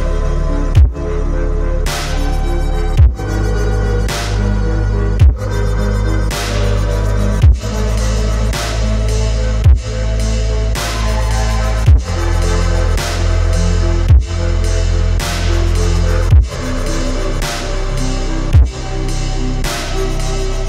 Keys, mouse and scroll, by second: 0.0-0.7 typing, 4.4-5.1 typing, 5.2 double click, 8.1 scroll down 1, 9.6 alt+scroll down 1, 12.9 ctrl+d, 15.4-15.7 alt+scroll down 1.